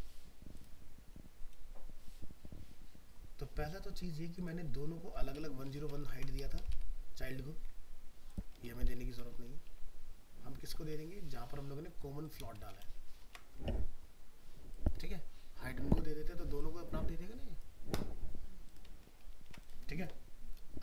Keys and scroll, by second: 6.1 ctrl+x, 12.8 ctrl+v, 13.2 ctrl+s, 19.1 ctrl+s.